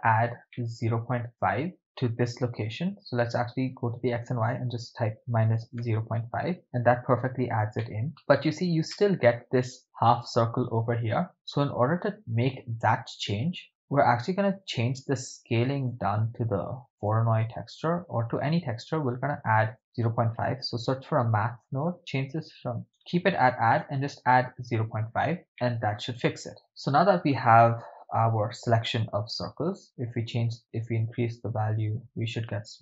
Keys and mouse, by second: 0.5-1.8 middle drag, 2.7-6.0 shift+drag, 7.9 shift+middle click, 9.0-9.4 ctrl+middle drag, 13.3-13.7 middle drag, 15.9-17.1 drag, 19.6 shift+a, 22.0-23.0 drag, 23.3-24.1 drag, 25.6 middle click, 26.3-26.6 ctrl+middle drag, 29.8 middle click, 30.6-32.8 drag.